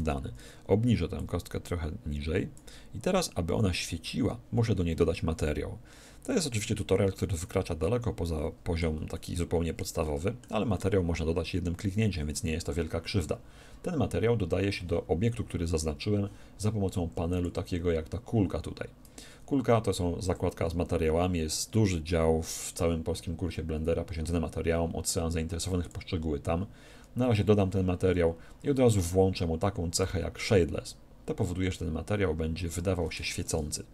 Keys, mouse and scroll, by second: 1.1-2.9 drag, 3.8-5.9 middle drag, 6.7-12.5 middle drag, 17.3-19.0 drag, 25.7-27.5 drag, 29.9-31.6 drag.